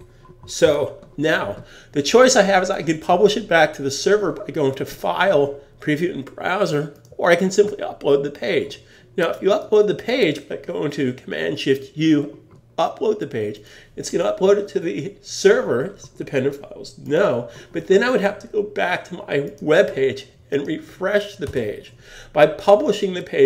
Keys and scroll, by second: 0.6 super+s, 21.4 Return.